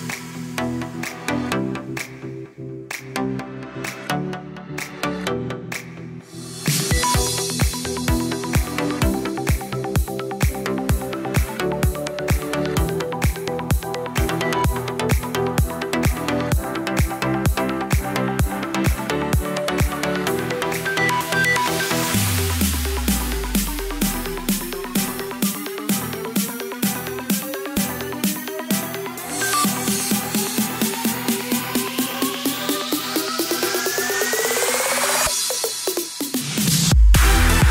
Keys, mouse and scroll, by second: 3.1 click, 4.8 ctrl+j, 5.4 s, 9.1 click, 10.9 click, 11.1-12.0 scroll up 3, 12.4-13.6 scroll up 4, 12.4 click, 13.6 g, 14.1 scroll down 3, 14.3 shift+middle click, 14.9 g, 15.9 scroll up 8, 16.2-16.9 shift+middle drag, 16.9 KP_7, 17.5-17.9 shift+middle drag, 17.9 s, 18.8 scroll up 3, 19.0-19.4 shift+middle drag, 19.9 click, 20.9 click, 21.5 scroll down 4, 21.7-22.5 shift+middle drag, 22.5 click, 23.9 scroll down 2, 24.0-24.7 shift+middle drag, 24.7-25.1 scroll down 2, 25.1 shift+middle click, 26.0 shift+d, 28.3 shift+click, 28.7 KP_1, 30.2 click, 31.0 click, 31.2 scroll down 1, 31.3-32.6 middle drag, 32.6 click, 33.5 click, 34.6 shift+click, 35.1 shift+click, 36.0 shift+click, 36.6-37.2 shift+drag.